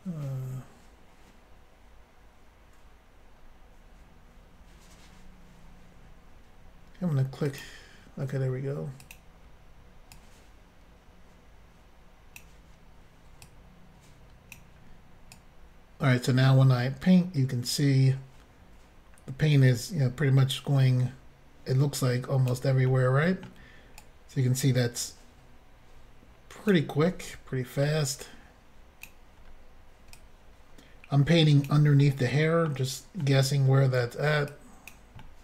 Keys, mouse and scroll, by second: 2.8-3.4 scroll up 3, 3.4 scroll down 2, 4.1 scroll down 1, 7.5 click, 7.6 click, 9.0 click, 10.1 click, 13.4 click, 15.4 click, 22.9 middle click, 23.0 scroll up 1, 24.0 click, 27.1 middle click, 28.2 click, 29.6 scroll down 2, 30.2 click, 32.0 middle click, 32.6 scroll up 1, 33.2 middle click, 34.5 click, 35.2 middle click.